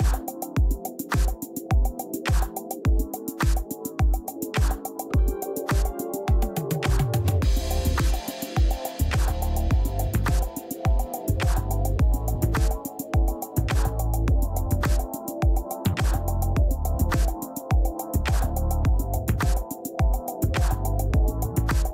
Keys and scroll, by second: 13.8 space, 14.3 space, 21.8 space.